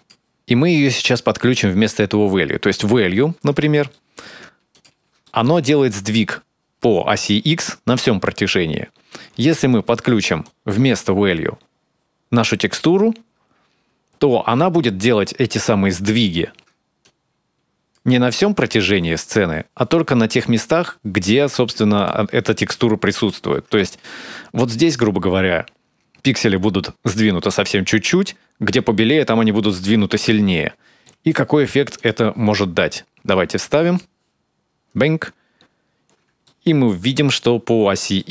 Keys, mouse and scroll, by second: 0.1 click, 3.3-3.7 scroll down 3, 3.7 middle click, 4.6 ctrl+shift+click, 5.1 middle click, 9.5 click, 10.2 click, 16.8 click, 21.8 ctrl+shift+click, 23.8-26.1 scroll up 7, 30.3-31.7 scroll down 7, 30.8 middle click, 31.8 ctrl+shift+click, 33.1 click, 34.6-35.5 scroll down 7, 35.4 scroll up 2, 36.2 shift+middle click, 37.0-37.4 scroll up 1, 38.0 shift+middle click.